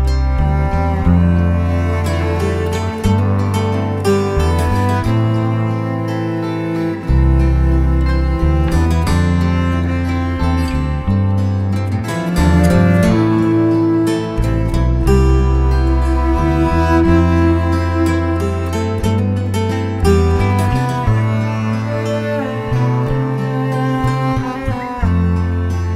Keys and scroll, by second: 8.7 b, 9.1 ], 12.8 [, 16.1 3, 16.6 ], 20.2 v, 21.5 space.